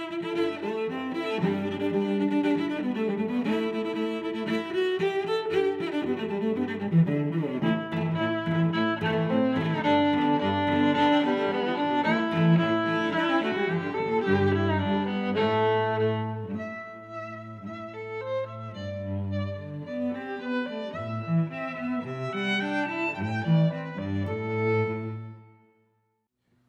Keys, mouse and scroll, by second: 5.8 0, 5.9 Return, 6.8 click, 7.1 Return, 7.3 0, 7.3 1, 7.5 Return, 9.0 click, 9.1 click, 9.1 click, 9.8 middle click, 11.1 middle click, 12.4 click, 12.5 click, 12.6 click, 12.9 click, 13.0 click, 22.9 shift+super+Tab, 22.9 click, 23.1 click, 23.8 click, 26.3 middle click.